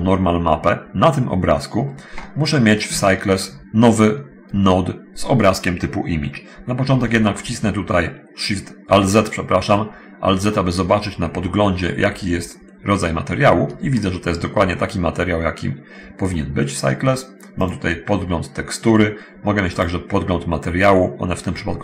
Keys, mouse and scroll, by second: 3.2-4.0 scroll up 1, 4.0-4.4 scroll up 1, 4.4 scroll down 1, 4.7 shift+middle click, 7.0 alt+z, 10.0 scroll up 1, 10.7 middle click, 11.4-12.2 scroll up 1, 12.2-12.6 scroll down 1, 13.7 shift+middle click, 14.8 shift+scroll up 1, 17.8 click.